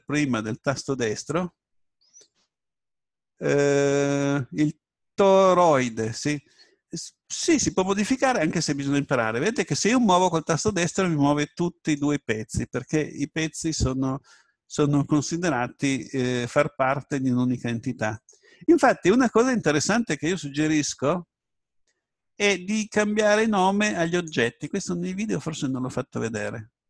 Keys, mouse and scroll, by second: 8.8 right click, 15.8 right click, 23.2-25.1 drag, 26.4-26.8 drag.